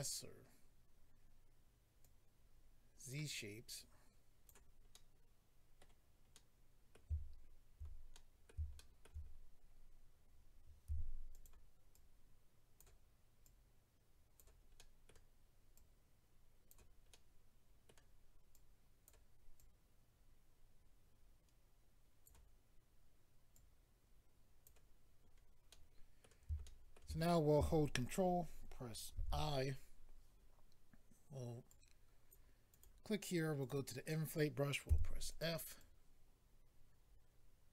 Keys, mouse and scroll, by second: 2.0 click, 3.7 click, 4.9 middle click, 5.9-6.3 scroll down 1, 6.3 middle click, 8.1 middle click, 8.7 shift+middle click, 9.2-9.7 scroll up 4, 10.9 f, 11.3 click, 11.4 click, 11.9 click, 13.4 click, 14.7 middle click, 15.7 click, 17.1 middle click, 18.5 click, 19.5 click, 23.5 click, 25.2-26.2 scroll down 3, 25.7 middle click, 29.1 ctrl+i, 31.7 click, 32.7 click, 32.8 click, 33.6 click, 33.7 click, 34.9 f, 35.3 click, 35.4 click, 35.8 click.